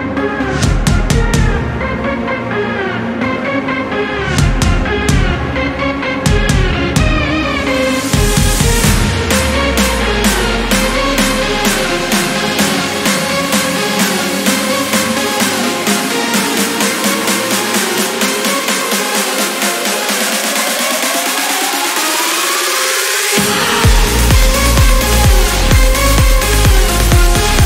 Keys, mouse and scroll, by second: 4.9 click, 6.4 click, 8.0 click, 9.1-10.6 typing, 11.8 click, 14.6 click, 16.4 3, 19.0 click, 21.0 click, 21.4 click, 22.4 scroll up 1, 22.9 scroll down 1, 25.0 click, 26.5 click.